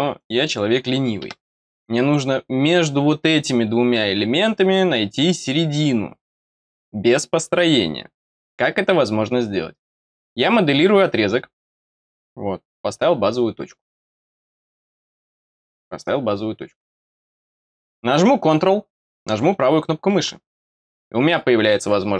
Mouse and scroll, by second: 0.1 click, 0.4 click, 10.7 click, 12.6 click, 14.7 click, 19.4 right click.